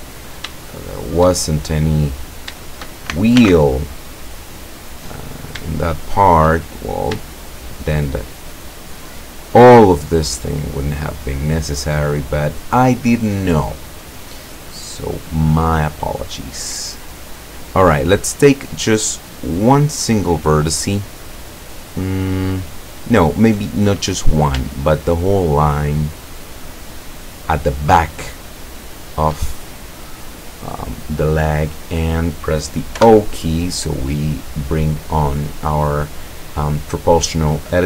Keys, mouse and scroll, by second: 0.1-0.5 scroll down 2, 0.7 shift+click, 1.8 scroll up 2, 2.4 shift+right click, 2.7 shift+right click, 3.4 alt+m, 3.9 alt+click, 5.3 right click, 5.7-6.5 shift+middle drag, 6.5 shift+scroll up 1, 7.3 shift+click, 8.6-9.3 scroll down 2, 9.7 scroll down 1, 9.7 click, 10.5 scroll down 1, 11.0 click, 11.8-12.1 scroll down 1, 12.3-13.6 drag, 13.8-14.3 scroll up 1, 14.8-16.5 drag, 18.3 right click, 19.5 right click, 20.2 scroll down 1, 20.6-23.4 middle drag, 23.6-24.4 scroll up 1, 25.0 shift+right click, 25.7 shift+right click, 26.3 shift+right click, 27.1 shift+right click, 27.7 shift+right click, 28.9 shift+right click, 29.6-29.9 shift+scroll down 1, 30.1-31.4 middle drag, 31.4 scroll down 1, 31.6 middle click, 33.0 o.